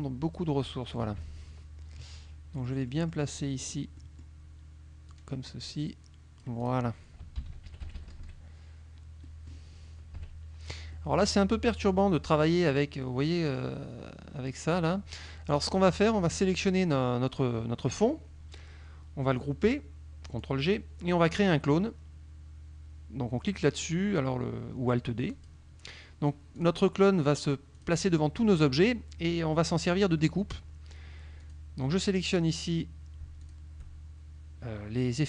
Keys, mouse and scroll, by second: 1.2 KP_Subtract, 2.6 click, 3.6 click, 4.4 click, 5.2-6.9 drag, 7.5 ctrl+KP_5, 7.8 ctrl+KP_Subtract, 9.4 click, 10.2 KP_Subtract, 11.0 click, 15.8 click, 16.2 middle click, 20.4 click, 25.4 click, 26.6 click, 27.8 click, 31.4 click, 33.4 shift+click.